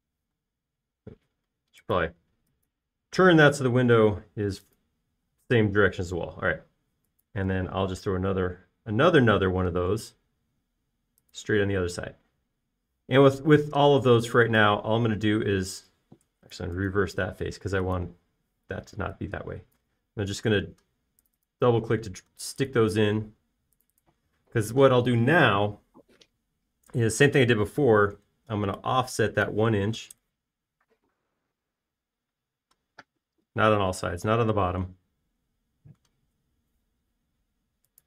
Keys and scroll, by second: 1.7 q, 6.6-7.4 typing, 8.6 typing, 13.0 space, 14.9 p, 17.3 Escape, 19.6 p, 25.8 space, 29.2 f, 31.0 typing, 31.2 Return, 36.8 space.